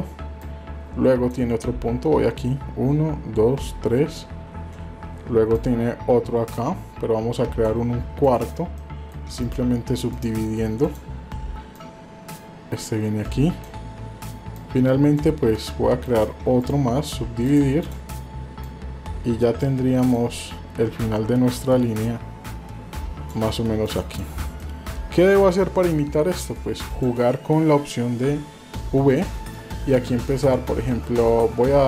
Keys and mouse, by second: 0.5 click, 5.5-7.7 drag, 8.2 shift+click, 8.8 shift+middle click, 9.4 right click, 10.8 click, 11.8-13.7 drag, 14.5 click, 16.0 shift+click, 16.7 right click, 17.8 click, 18.6 click, 20.1-23.4 drag, 23.8 click, 24.7 shift+middle click, 26.9 click.